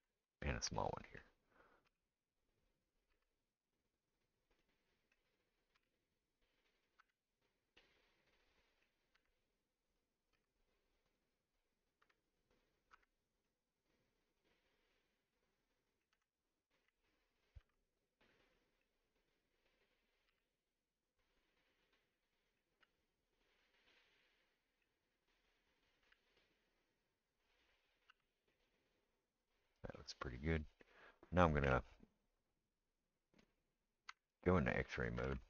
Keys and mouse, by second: 0.2 click, 0.4-19.2 middle drag, 1.9 e, 3.1 s, 5.8 g, 7.0 Tab, 9.1 Tab, 10.3 s, 12.0 g, 12.9 Tab, 16.1 Tab, 17.6 ctrl+r, 19.2 click, 19.3-25.4 middle drag, 20.3 g, 22.7 g, 25.4 click, 25.6-35.4 middle drag, 26.1 g, 28.1 Tab, 31.6 KP_1, 34.1 Tab, 35.2 alt+z.